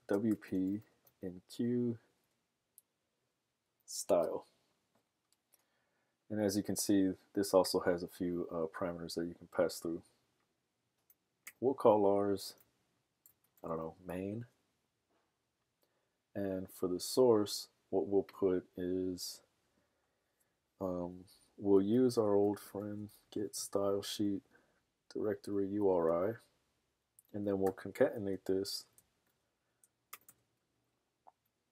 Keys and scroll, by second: 13.2-14.1 typing, 21.6-24.0 typing, 24.9 Down, 25.1 Down, 25.3 Down, 25.9 Return.